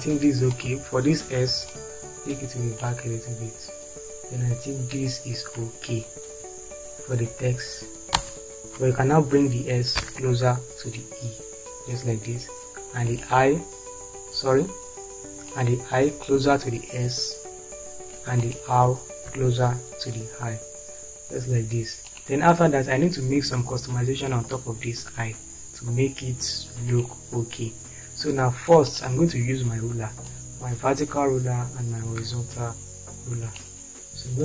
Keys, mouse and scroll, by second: 8.3 space, 10.0 Right, 18.3 Right, 31.5-34.4 drag.